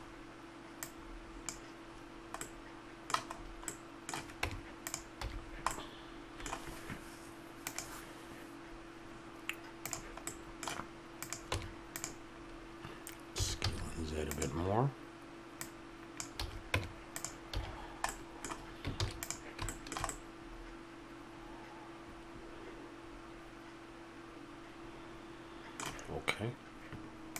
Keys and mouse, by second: 0.0 middle click, 0.8-2.4 drag, 2.4-4.4 middle drag, 4.4 Tab, 5.2 a, 5.5-7.7 middle drag, 11.2 right click, 11.5 Tab, 13.4 s, 15.5-16.7 drag, 16.4 a, 16.7 Tab, 17.5 a, 19.0 ctrl+s.